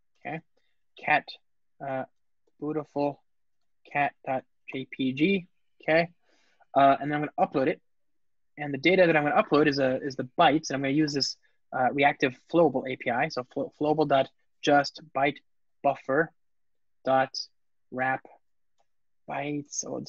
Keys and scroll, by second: 1.7 alt+BackSpace, 9.1 Return, 14.5 Return.